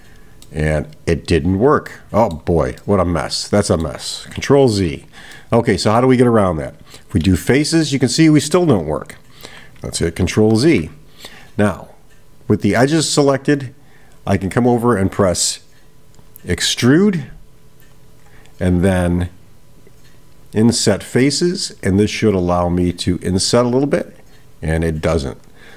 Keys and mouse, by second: 0.4-2.7 middle drag, 2.8-4.2 middle drag, 5.4-6.0 middle drag, 20.7 click, 22.3-25.5 drag.